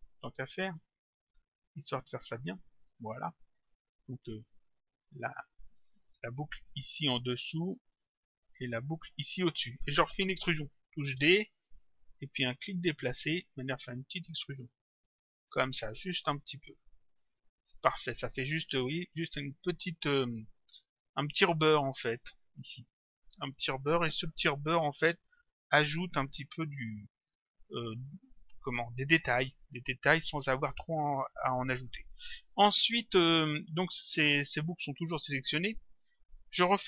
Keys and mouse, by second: 2.3 shift+click, 3.8 click, 5.1 click, 7.6 click, 11.1 d, 13.4 click, 16.5 click, 21.4 click, 31.4 click.